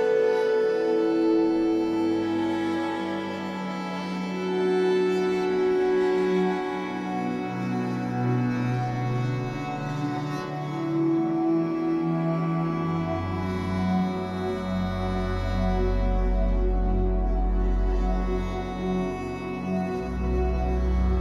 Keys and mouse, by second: 0.2 click, 2.0 click, 3.4 g, 5.5 click, 7.5 click, 7.9-9.1 typing, 9.6 drag, 10.6 typing, 11.0 drag, 11.5 click, 12.4 typing, 13.6 click, 14.0 typing, 16.5 typing, 18.1 click, 18.6 typing.